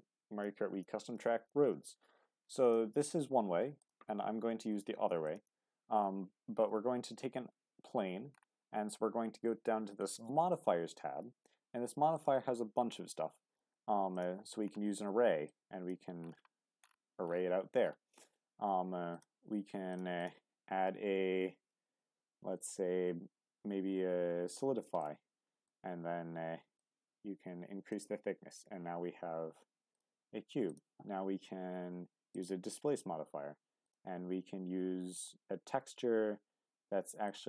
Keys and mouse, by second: 3.8 click, 5.2-25.0 drag, 25.0-25.7 middle drag, 26.8-30.0 drag, 30.8-34.0 drag.